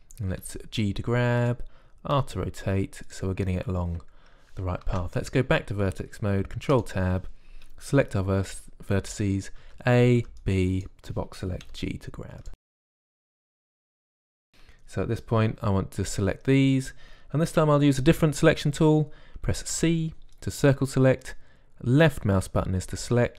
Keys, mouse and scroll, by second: 1.3 g, 3.0 r, 5.7 ctrl+Tab, 10.5 a, 11.1 b, 12.5-14.3 typing, 14.1-16.9 drag, 20.6 c.